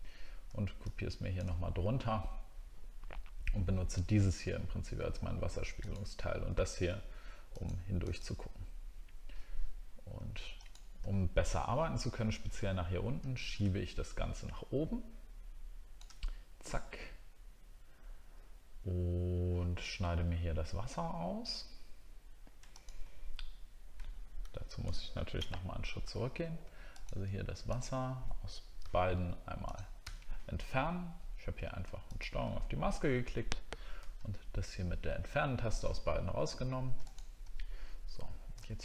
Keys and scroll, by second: 24.4 ctrl+z, 34.0 ctrl+d, 37.0 ctrl+d.